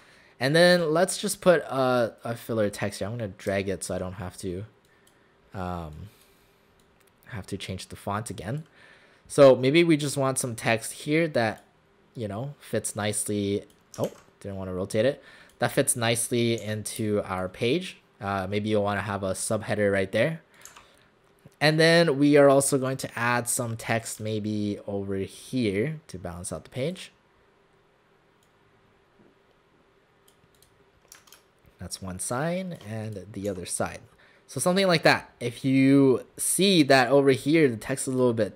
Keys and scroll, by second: 14.1 ctrl+z, 16.6 w, 17.0 space, 20.7 w, 33.5 w.